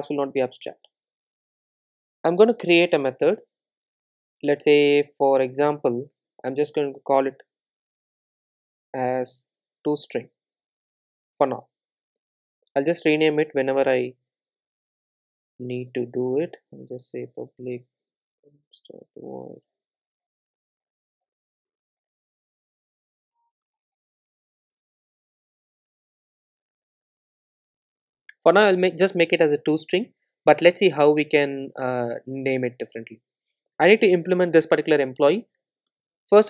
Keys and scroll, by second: 16.4 Return, 19.5 Return, 21.7 super+z, 24.9 Return, 28.0 super+s, 35.9 alt+Return.